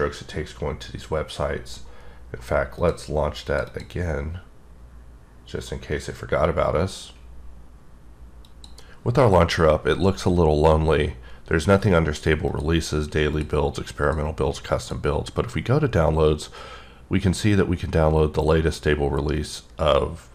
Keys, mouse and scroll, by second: 2.8 click, 3.5 click, 3.7 double click, 8.6 click, 13.3 click, 14.0 click, 14.8 click.